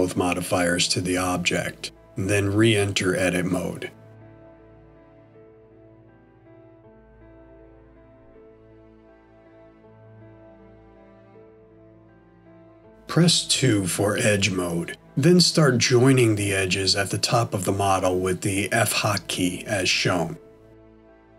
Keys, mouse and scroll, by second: 0.3 click, 2.4 click, 5.6 Tab, 7.5 middle click, 10.9 scroll up 1, 14.5 2, 18.5 click, 19.7 shift+click, 21.0 f.